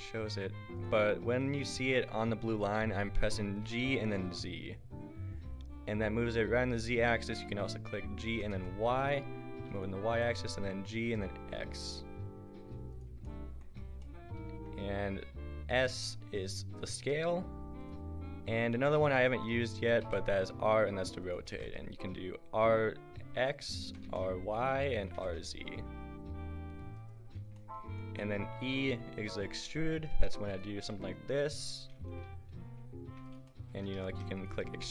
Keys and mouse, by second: 1.5 g, 4.0 g, 8.4 g, 10.3-14.1 middle drag, 10.9 g, 15.9 s, 20.0 r, 21.6 r, 23.8 r, 25.1 r, 30.1 Tab, 30.5 right click, 30.9 e, 34.0 ctrl+z, 34.5 click, 34.8 e.